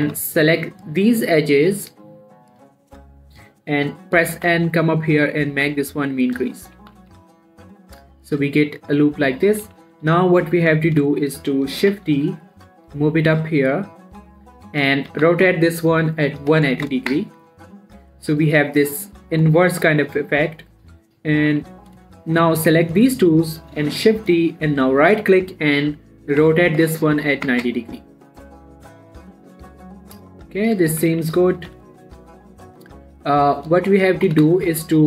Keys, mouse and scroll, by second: 0.4 z, 1.0 click, 4.8 n, 6.3 click, 7.0 middle click, 7.2 z, 7.4 Tab, 7.6 middle click, 8.6 scroll up 1, 8.8 middle click, 10.5 7, 10.9-11.4 scroll up 1, 11.5 shift+scroll down 1, 11.6 shift+middle click, 12.2 shift+d, 12.5 y, 14.6 click, 15.5 r, 18.1-21.4 middle drag, 21.8 7, 22.7 shift+click, 24.3 shift+d, 24.6 right click, 25.2 r, 29.2-29.7 scroll down 1, 29.7-32.0 middle drag, 31.4 middle click, 32.0 7, 32.3-33.0 scroll up 2, 33.0-33.6 drag, 33.7-34.1 shift+middle drag, 34.1-34.7 shift+scroll up 3, 34.7 scroll down 2, 34.9 shift+middle drag.